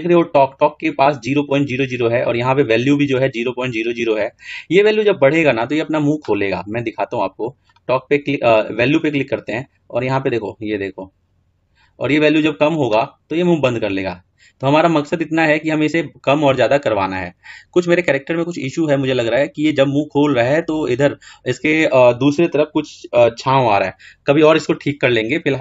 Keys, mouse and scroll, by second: 0.0-2.6 scroll down 2, 7.7 click, 8.3-9.7 drag, 10.3-12.7 drag, 14.1-16.6 drag.